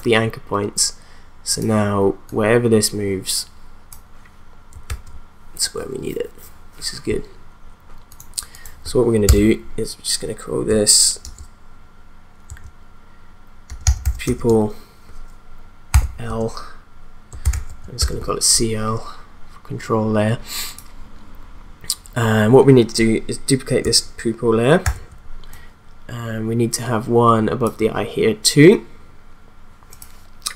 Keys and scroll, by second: 4.8 ctrl+z, 9.3 Return, 11.2 shift+p, 12.5-14.5 typing, 15.9-18.0 typing, 24.8 ctrl+d.